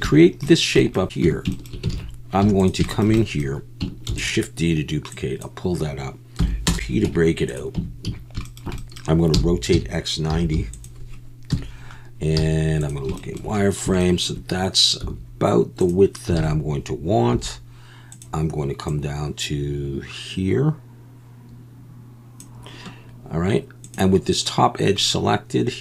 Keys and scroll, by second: 1.2 Tab, 1.9 alt+a, 2.4 3, 4.1 shift+d, 6.4 p, 7.1 Tab, 7.8 Tab, 8.1 a, 9.3-12.4 typing, 15.0 s, 16.4 alt+a, 17.3 2.